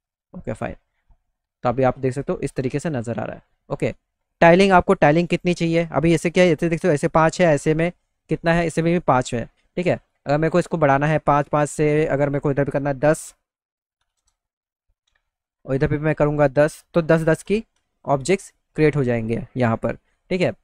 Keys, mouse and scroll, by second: 0.7 middle click, 1.6-3.1 middle drag, 11.2 click, 12.2 click, 15.8 click.